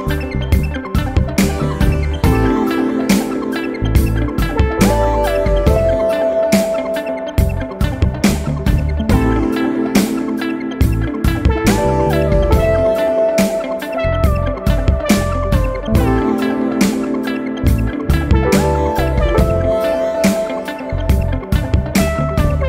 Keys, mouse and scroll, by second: 0.7 click, 1.6-2.8 typing, 4.4-9.0 typing, 10.9 click, 12.2 click, 14.3 click, 15.2 click, 16.7-18.7 typing, 21.0 shift+8, 21.5 shift+p, 21.8 shift+i.